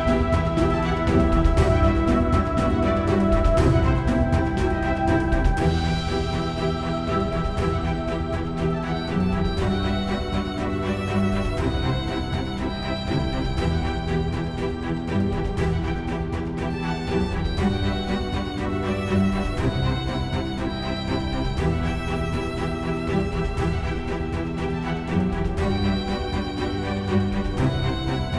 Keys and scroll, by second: 21.7 typing, 25.3-28.3 typing.